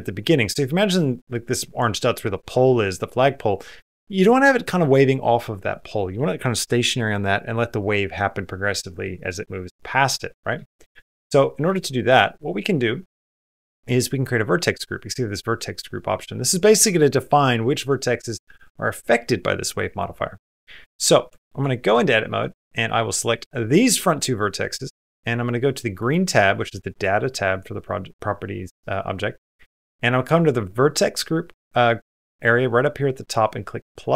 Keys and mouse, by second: 10.5 shift+middle click, 10.8 Tab, 11.5 space, 11.7 middle click, 20.5 middle click, 21.1 shift+middle click, 21.4 Tab, 21.9 middle click, 22.8 click, 24.0 middle click.